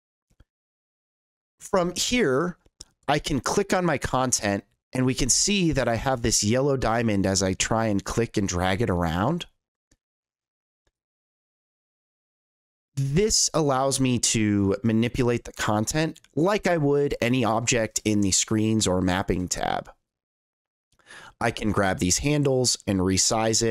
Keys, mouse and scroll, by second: 0.0 click, 2.0 click, 3.3-5.7 drag, 6.9-9.7 drag, 11.0-12.9 drag, 14.6-17.7 drag, 20.1-20.5 drag, 21.9-23.7 drag.